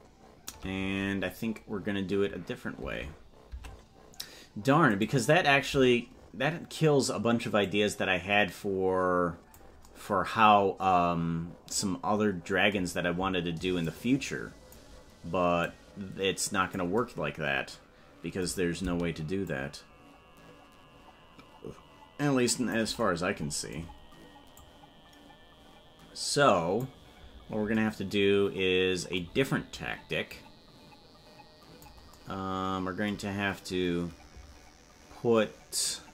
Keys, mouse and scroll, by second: 4.0 Tab, 5.1 right click, 7.6-9.6 drag, 13.8 click, 15.7-16.8 drag, 19.4-22.8 shift+drag, 24.5-26.8 drag, 30.3-31.9 drag.